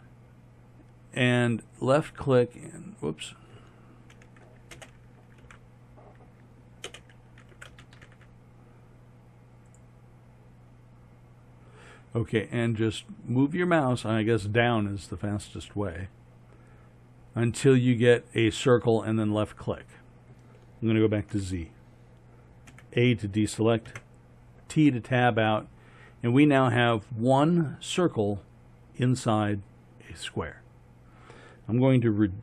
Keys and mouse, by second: 4.8 space, 21.3 z, 22.7 a, 23.9 Tab, 26.3 middle click, 29.4 middle click.